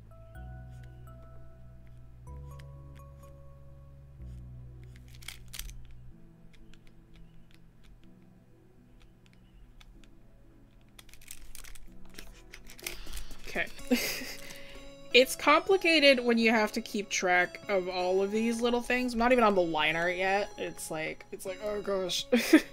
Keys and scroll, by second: 1.3 ctrl+z.